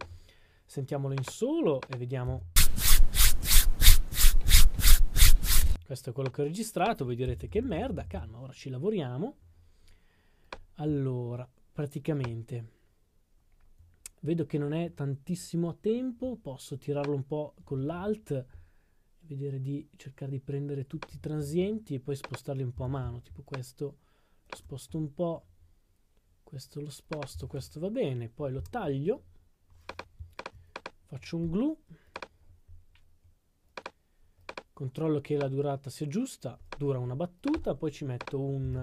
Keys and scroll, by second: 7.8 typing, 22.7 s, 27.3 s, 38.4-38.8 typing.